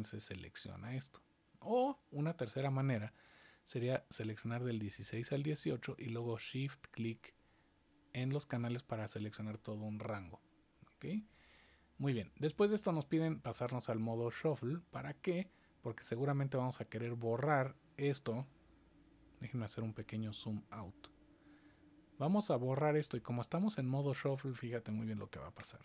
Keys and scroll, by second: 25.5 BackSpace.